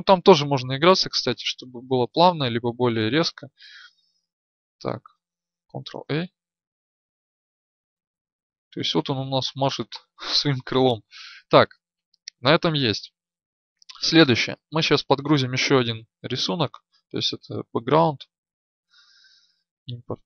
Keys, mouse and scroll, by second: 0.3 click, 4.5-5.7 drag, 5.7 alt+a.